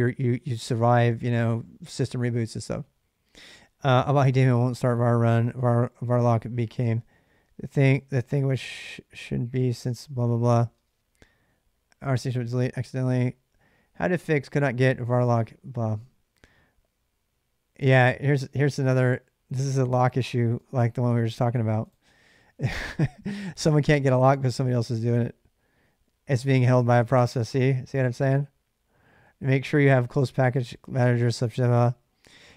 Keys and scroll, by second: 10.5 space, 26.1 j, 26.3 j, 26.8 k.